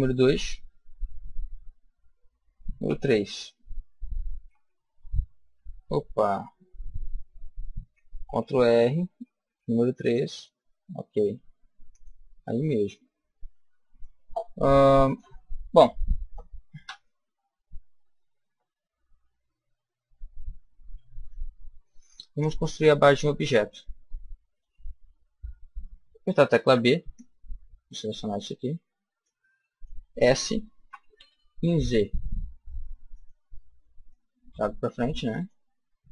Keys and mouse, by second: 8.2 ctrl+r, 10.1-13.7 drag, 12.9-17.4 middle drag, 16.7 a, 26.5 b, 29.1 click, 30.8 s, 33.1-36.0 drag.